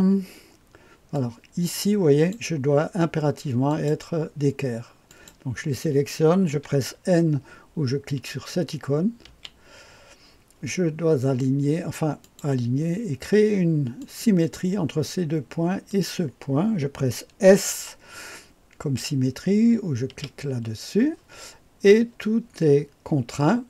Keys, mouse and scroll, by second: 1.1-2.3 drag, 3.6 click, 5.0 click, 9.3 n, 12.2 click, 14.0 click, 15.8 click, 20.0 s.